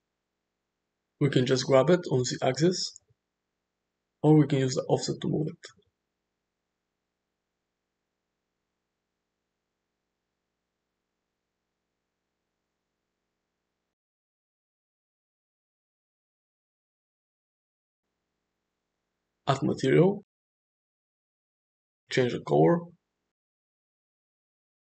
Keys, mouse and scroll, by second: 2.1 g, 5.1-9.0 shift+drag, 9.5-10.3 middle drag, 10.5 space, 14.6 space, 15.1-16.4 middle drag, 18.1 click, 19.7 click, 22.4 click.